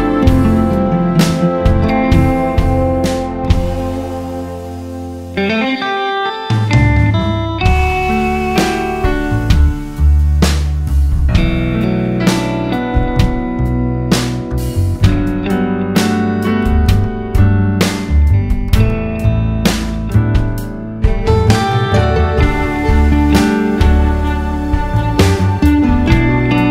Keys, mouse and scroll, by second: 0.6 Tab, 1.0 alt+click, 1.1 scroll down 1, 1.7 alt+shift+click, 1.9 z, 2.8 Tab, 2.9 `, 3.4 scroll up 1, 3.8 Tab, 4.4 middle click, 4.4-5.3 scroll down 2, 5.3 Tab, 6.0 middle click, 6.0 `, 6.8 Tab, 7.0 `, 7.5-7.9 scroll up 2, 7.9 `, 8.5 Tab, 9.4 `, 9.6 Tab, 10.4 right click, 10.8 ctrl+b, 12.7 click, 13.0 Tab, 13.2 scroll down 1, 13.4 `, 14.0 scroll up 1, 14.3 Tab, 15.6 click, 16.1 scroll down 1, 17.0 ctrl+r, 17.5 right click, 17.9 ctrl+b, 18.9 click, 19.1 Tab, 20.4 KP_1, 21.3 alt+h, 21.5 `, 21.8 alt+a, 21.9 `, 22.2-22.6 scroll up 1, 22.6 `, 23.4 Tab, 24.6 Tab, 24.8 `, 25.8 click, 26.2 KP_Divide, 26.4 Tab.